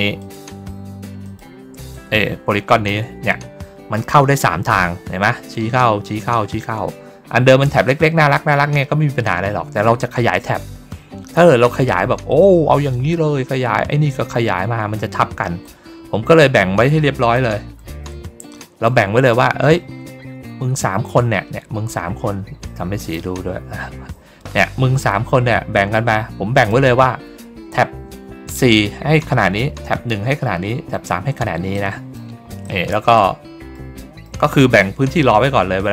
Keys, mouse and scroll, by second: 0.1 shift+click, 1.1 shift+click, 1.8 click, 15.5-17.2 drag, 19.1 ctrl+middle click, 22.9 click, 24.0 ctrl+middle click, 24.8 ctrl+middle click, 26.5 click, 31.6 middle click, 32.5 middle click, 33.1 middle click, 33.9 middle click.